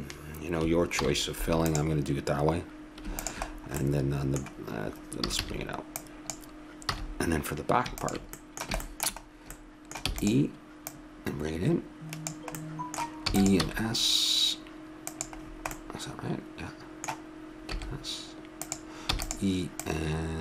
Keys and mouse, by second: 1.0 alt+m, 3.2-5.1 drag, 5.1 middle click, 5.3 a, 5.4 a, 6.0-7.6 drag, 6.9 a, 8.0-9.7 drag, 9.7-10.9 middle drag, 10.1 e, 10.9-12.6 drag, 13.2 e, 13.6 s, 17.7 s, 19.1 e, 19.8-20.4 drag.